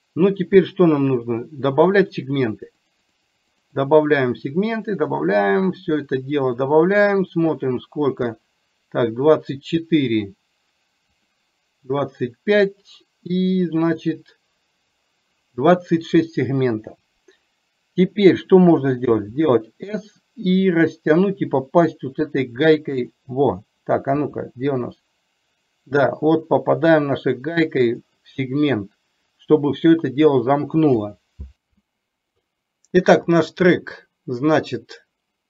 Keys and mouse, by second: 2.8 click, 3.2 click, 3.6 click, 3.8 click, 4.3 click, 4.5 click, 4.9 click, 5.4 click, 5.7 click, 5.9 click, 6.7 click, 6.9 click, 7.1 click, 19.2 s, 24.2 s.